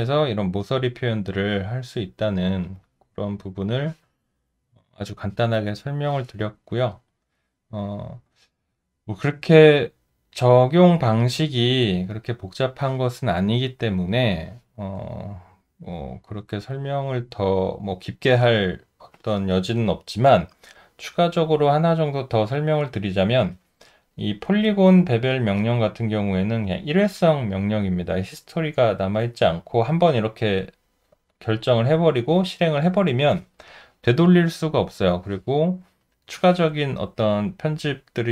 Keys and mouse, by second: 3.2 alt+middle click, 7.0 alt+right click, 7.7 alt+middle click, 8.7 alt+click, 10.0 alt+middle click, 15.9 alt+right click, 17.0 alt+middle click.